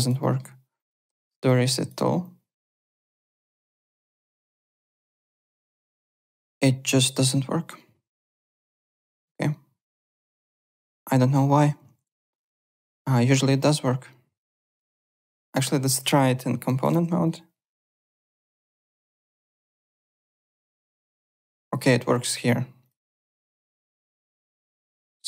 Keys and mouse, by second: 0.2 middle click, 0.8 click, 1.4 middle click, 1.7 alt+click, 2.9 ctrl+z, 3.5 click, 12.0 alt+Tab, 12.6 alt+click, 14.6 click, 15.3 3, 15.4 click, 16.7 ctrl+d, 16.9 ctrl+w, 17.7 click, 18.6 w, 19.7 r, 20.6 click, 22.0 ctrl+z, 22.8 click, 23.5 click.